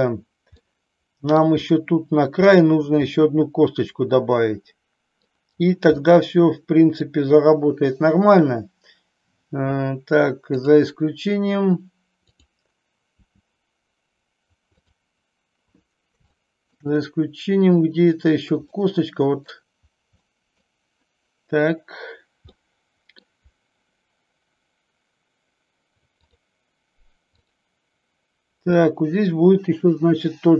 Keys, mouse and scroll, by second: 0.5-1.3 middle drag, 1.5-2.4 middle drag, 3.2-5.2 middle drag, 5.9-6.9 middle drag, 10.4 click, 12.3-12.7 drag, 13.2 r, 16.2 shift+middle click, 18.6 middle click, 20.2 middle click, 22.6 middle click, 26.2 click, 27.3 click.